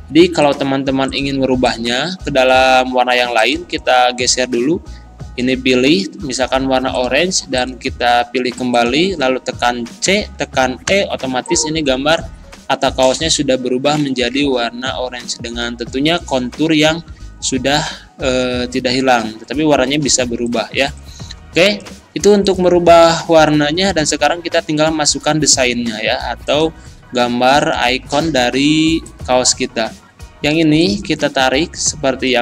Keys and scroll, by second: 10.1 c.